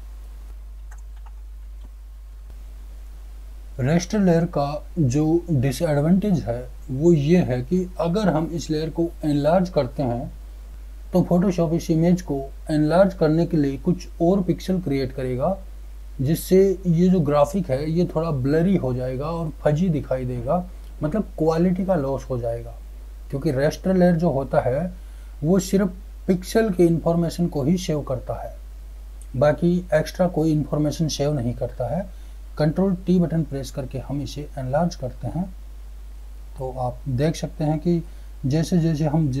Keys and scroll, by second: 1.2 ctrl+z, 2.3 ctrl+0, 33.5 ctrl+t.